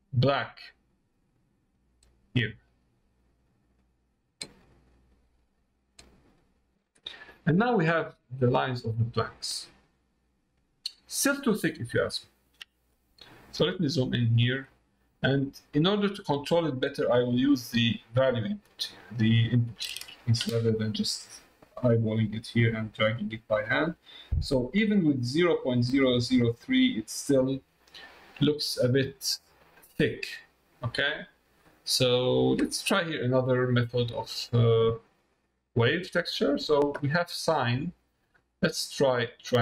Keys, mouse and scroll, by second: 0.4-6.7 drag, 7.5 middle click, 8.9 middle click, 10.0 middle click, 11.3 middle click, 14.7 middle click, 16.0-17.4 drag, 19.0 click, 21.0-23.5 drag, 28.6 middle click, 31.6 middle click, 32.8 middle click, 34.9 middle click, 36.4 middle click, 38.0-39.6 drag.